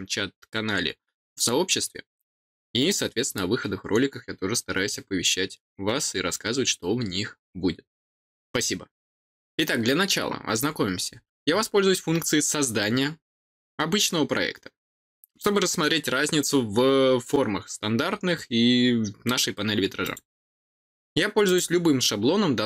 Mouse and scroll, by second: 20.0 click, 21.4 click.